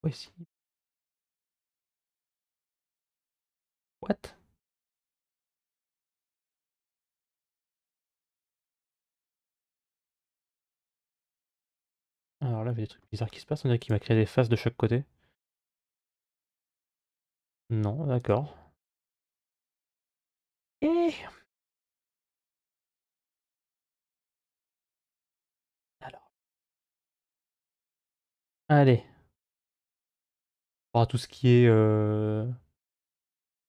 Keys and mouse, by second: 4.4 g, 7.6 3, 9.8-12.8 middle drag, 13.6-15.4 right drag, 15.4 x, 17.4 ctrl+z, 23.2 g, 27.3 g.